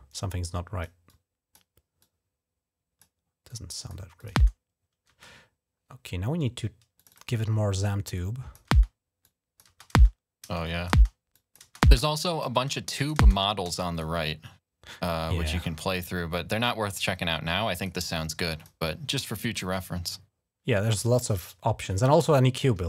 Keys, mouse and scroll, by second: 0.2 click, 0.9 click, 1.8-2.8 drag, 3.2-4.3 drag, 6.8 click, 6.9 click, 7.9 click, 8.6-10.3 typing, 9.0 click, 10.4 click, 11.1 click, 12.5 click, 13.0 click, 13.7 click, 16.7 click, 18.4 click, 19.3 click, 19.7 click.